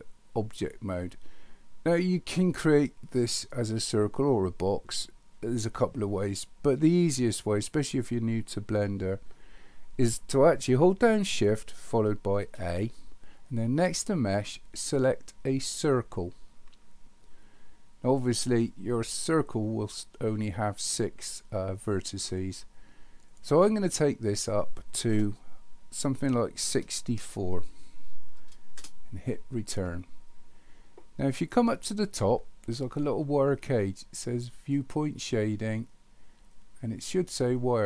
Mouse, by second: 23.8-29.9 drag.